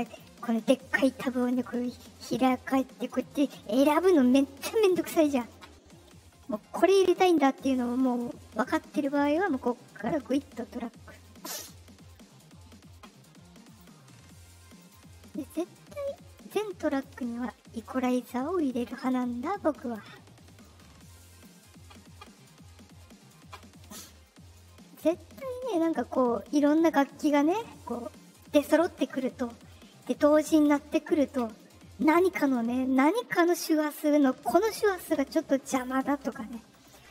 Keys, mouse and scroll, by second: 0.0 click, 5.2 click, 6.4 click, 8.0 click, 9.0 click, 10.0-11.5 drag, 13.6 click, 14.7 click, 16.1-16.9 drag, 18.6 click, 19.7 click, 20.6 click, 23.3 middle click, 23.3 scroll up 2, 24.2-26.3 drag, 27.2 click, 36.7 click.